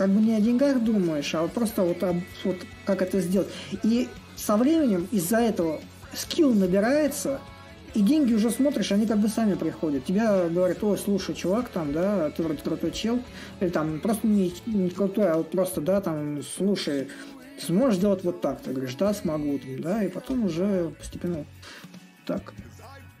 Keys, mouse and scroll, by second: 2.2 shift+s, 3.8-8.8 drag, 11.6-16.6 drag, 18.2-23.2 drag.